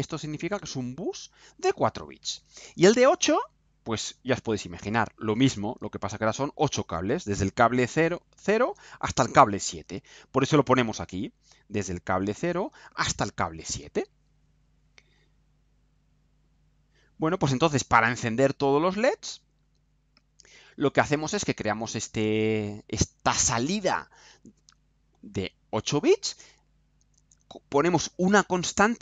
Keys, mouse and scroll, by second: 1.9-3.0 scroll down 2, 3.0-3.9 scroll down 1, 4.1-5.0 scroll up 1, 16.1 click, 18.3 click.